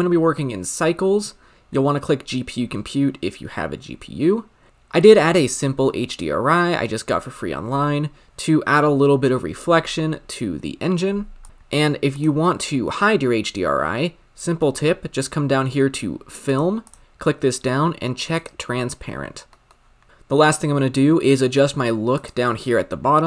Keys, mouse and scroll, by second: 4.7-6.0 scroll up 7, 12.0 click, 12.6 scroll down 3, 12.8-14.7 middle drag, 14.7-16.7 scroll up 3, 18.3 click, 19.5-20.1 middle drag, 20.1 click.